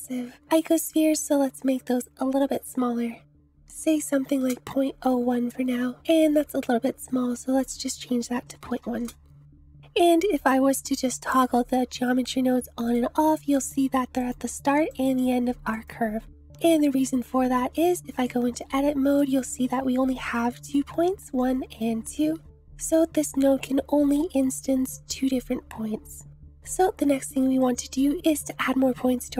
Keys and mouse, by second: 2.4-5.1 drag, 7.6-9.8 drag, 12.9 click, 13.5 click, 14.2 click, 14.9 click, 15.8 click, 16.4 click, 17.8 Tab, 19.1 click, 20.3 click, 21.5 click, 22.7 click, 26.6 Tab, 27.6 click.